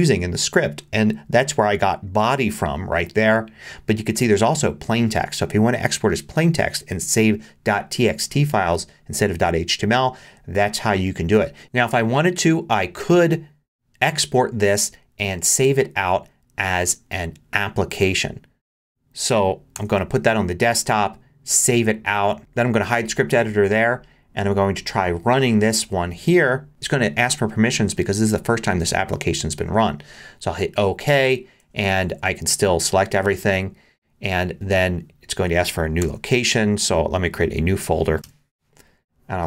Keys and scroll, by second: 19.7 super+d, 32.1 super+a, 36.0 super+d, 38.1 2, 38.2 Return.